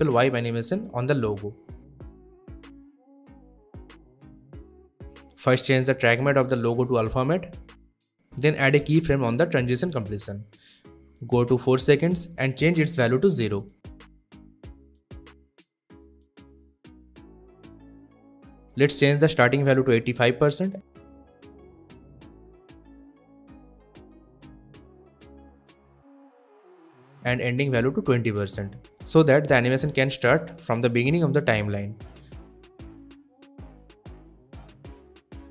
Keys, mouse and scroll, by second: 5.5 click, 8.2-8.6 drag, 13.9 space, 16.0 space, 16.5-18.4 drag, 20.6-21.5 typing, 22.6-24.5 drag, 28.9-29.7 typing, 30.8-35.2 drag.